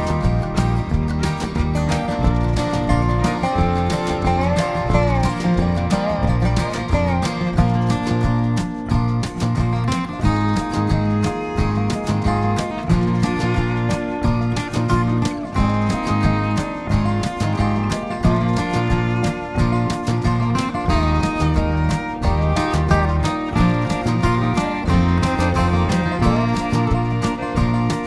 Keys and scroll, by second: 19.2 ctrl+[, 20.2 ctrl+], 23.9 ctrl+-, 25.1 v.